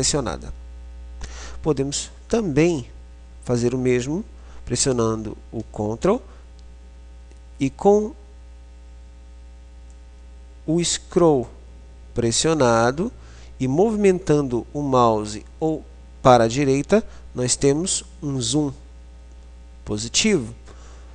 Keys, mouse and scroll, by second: 10.0-21.1 middle drag.